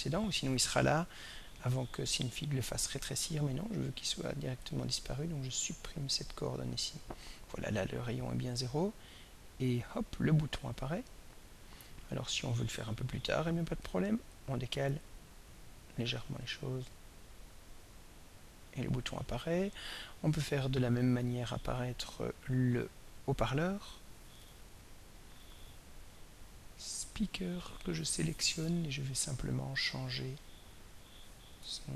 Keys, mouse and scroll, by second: 0.1-3.8 drag, 4.6 right click, 5.7 drag, 6.8-13.2 drag, 13.8-14.6 drag, 14.9 click, 16.3-21.3 drag, 24.4 click, 27.0 click.